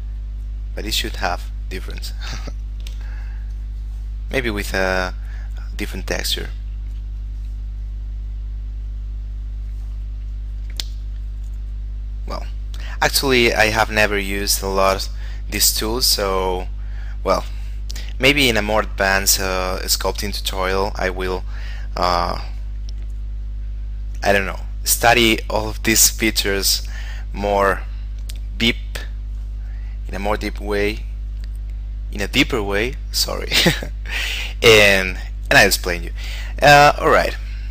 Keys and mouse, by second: 2.4 shift+middle click, 3.3 click, 7.4 click, 10.5 click, 16.0 click, 20.7 click, 24.8 click, 27.8 click, 33.4 click.